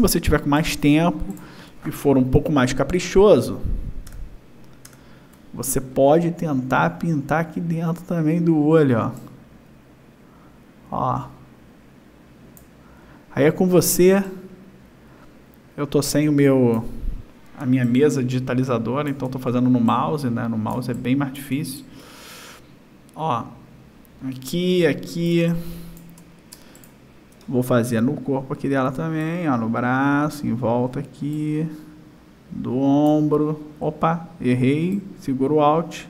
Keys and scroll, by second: 1.2 space, 3.8 ctrl+=, 18.5 space, 21.6 space, 26.2 space.